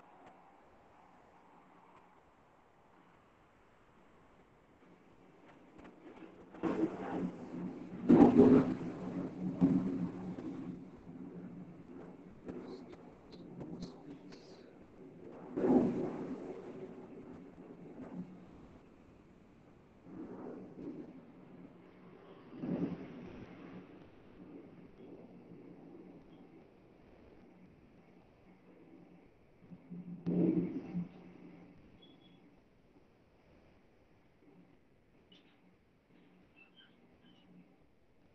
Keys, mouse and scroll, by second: 10.2 click, 13.2 click, 24.7 click, 25.2 Delete, 27.8 Delete, 27.8 click, 29.8 click, 30.0 Delete, 33.3 Delete, 33.9 click, 34.4 Delete, 34.8 click, 35.0 Delete, 35.6 middle click.